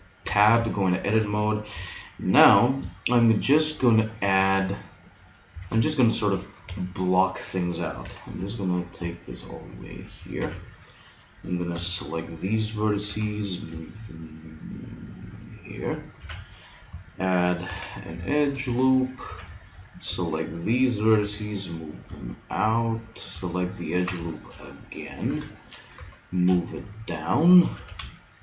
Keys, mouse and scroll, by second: 0.2 Tab, 1.8 g, 5.5 a, 6.7 b, 8.1 g, 10.5 a, 11.7 b, 13.1 g, 16.2 a, 17.7 ctrl+r, 19.1 click, 19.3 a, 20.1 b, 21.3 g, 23.9-25.7 drag, 25.9 g, 27.4 click, 27.8 a.